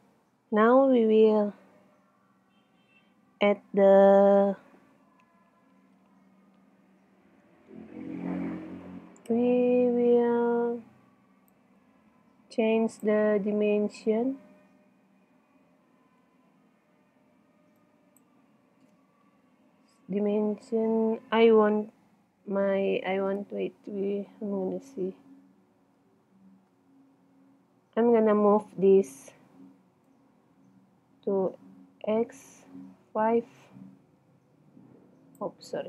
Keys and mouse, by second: 8.8 middle click, 9.3 n, 11.2 middle click, 13.1 middle click, 15.2 middle click, 16.1 Tab, 17.9-19.3 right drag, 19.5 Tab, 21.4 middle click, 22.4 middle click, 24.3 KP_1, 24.8-27.0 middle drag, 27.7 middle click, 30.1 click, 30.2 middle click, 31.0 click, 31.8 middle click.